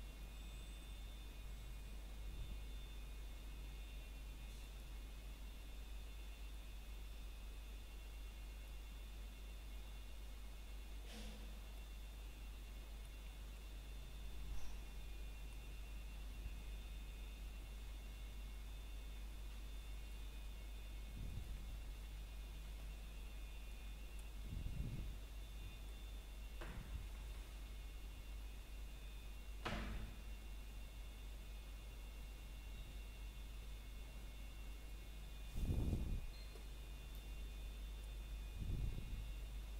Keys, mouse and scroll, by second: 0.0 scroll down 1, 0.6 middle click, 1.1 scroll up 1, 1.7 middle click, 2.6-3.2 scroll up 1, 3.2 middle click, 3.6 scroll up 1, 4.8 middle click, 5.2 scroll up 1, 7.4 Tab, 8.6 click, 9.0-9.4 scroll down 1, 9.4 middle click, 9.7 scroll up 1, 16.9 i, 19.9 click, 26.1 click, 36.4 middle click, 37.3-39.1 scroll up 1.